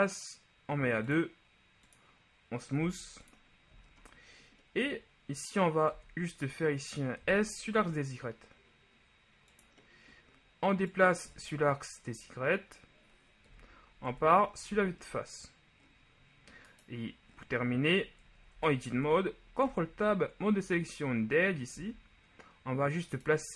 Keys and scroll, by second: 3.0 w, 6.1 Tab, 7.3 s, 7.9 y, 13.7 KP_1, 14.3 Tab, 14.9 a, 18.7 ctrl+Tab, 19.2 ctrl+Tab, 19.8 ctrl+Tab, 21.9 z.